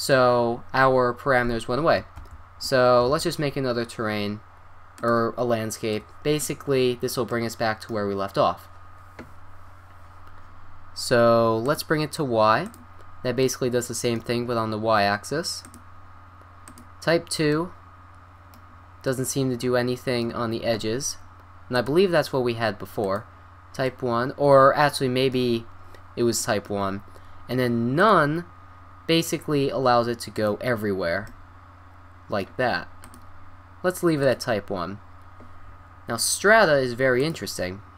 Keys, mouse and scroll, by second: 2.2 ctrl+z, 3.0 shift+a, 5.9-7.2 middle drag, 9.6 middle click, 10.3 middle click, 10.5-11.0 middle drag, 11.6-13.0 drag, 13.3 drag, 15.6-16.8 drag, 22.1 click, 28.0 click, 33.0-34.1 drag, 34.7 drag, 37.4-37.9 drag.